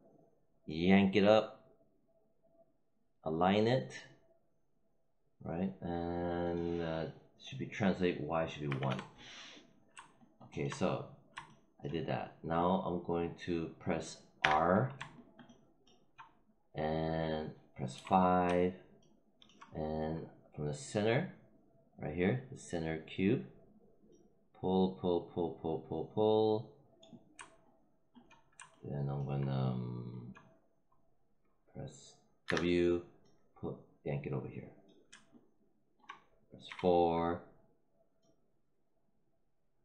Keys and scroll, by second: 8.6 1, 8.8 Return, 14.3 r, 17.8 5, 32.4 w, 36.5 4.